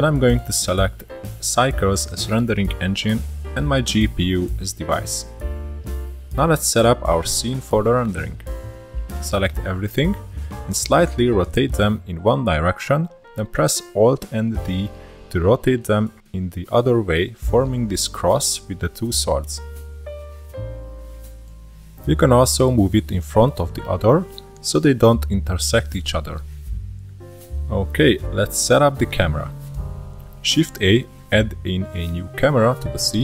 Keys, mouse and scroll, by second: 0.0-1.9 drag, 2.6 click, 3.8-9.2 drag, 10.8 click, 13.0 scroll up 1, 13.1 r, 16.5 alt+d, 19.2 r, 21.9 click, 23.0-25.0 middle drag, 25.0 click, 26.7 scroll down 3, 26.9-29.9 shift+middle drag, 30.3 scroll down 1, 30.5-31.8 middle drag, 31.8 shift+a.